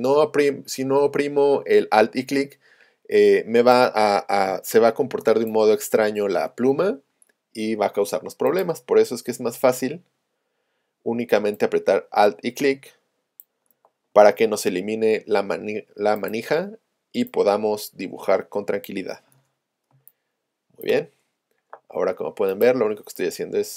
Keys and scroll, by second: 4.5 space.